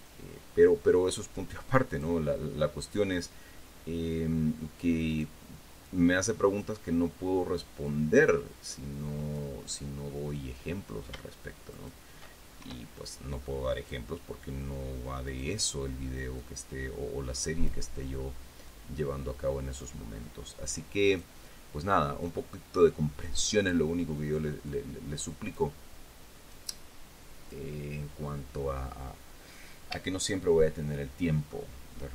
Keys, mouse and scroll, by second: 2.2 click, 5.4 right click, 6.2 click, 8.2-9.9 drag, 12.1 shift+right click, 12.9 shift+e, 14.1 click, 15.6 right click, 16.7-18.2 drag, 19.0-20.3 drag, 21.4 right click, 22.5-24.2 drag, 25.0-26.1 drag, 26.8-28.0 drag, 29.6-30.0 scroll down 1, 30.5-32.0 shift+middle drag.